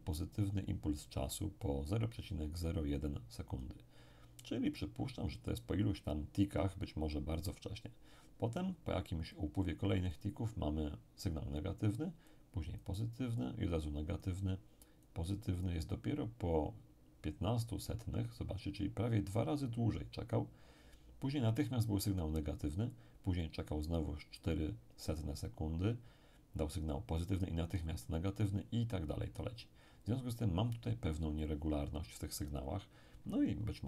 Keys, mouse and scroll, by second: 1.6-4.5 drag, 9.3 click, 12.3-16.6 drag.